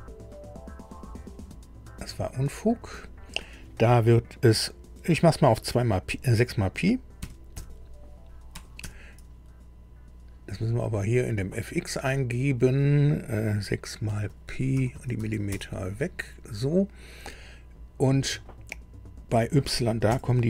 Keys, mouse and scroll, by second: 1.1-2.2 drag, 3.0 click, 7.2 KP_6, 8.5 p, 8.8 i, 12.0 click, 14.0 Right, 14.2 Right, 14.9 BackSpace, 15.1 BackSpace, 15.5 Return, 17.0 click, 20.0 KP_Subtract.